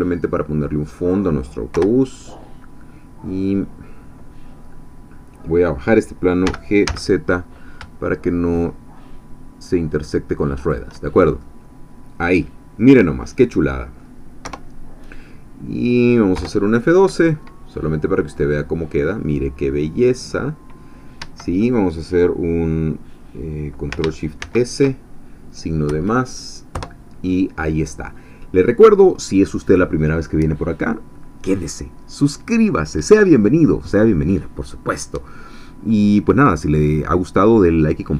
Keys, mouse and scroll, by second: 0.8 click, 1.7 KP_0, 4.5 scroll up 2, 6.4 g, 10.6 shift+click, 11.1 shift+scroll down 2, 11.4-14.4 drag, 14.4 KP_0, 16.4 F12, 18.5-19.4 scroll down 2, 19.4 scroll up 2, 21.2 Escape, 24.4 ctrl+shift+s, 25.9 KP_Add, 26.7 Return.